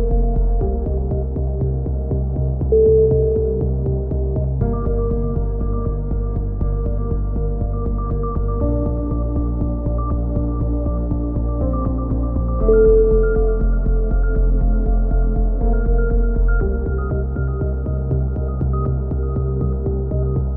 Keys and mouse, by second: 0.7 z, 1.0 click, 2.1 KP_3, 2.5 z, 4.6-5.6 middle drag, 8.7 b, 10.0 middle click, 10.4 click, 10.9 middle click, 11.3 click, 13.9 c, 15.1-17.5 drag, 17.5 a, 17.6 z, 18.1-19.2 drag, 19.2 right click, 19.7 x, 20.3 right click.